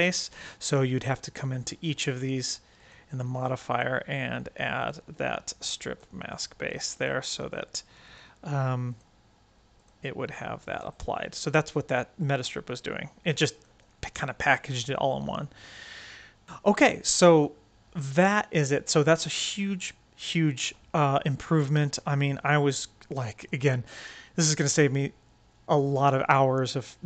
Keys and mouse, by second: 0.1 click, 0.7 click, 2.1 click, 2.6-3.7 drag, 4.8-5.9 drag, 6.8 click, 7.9-8.9 drag, 9.7-10.8 drag, 11.3-13.5 right drag, 15.3-17.5 right drag, 21.6-22.6 right drag, 22.6-23.5 drag.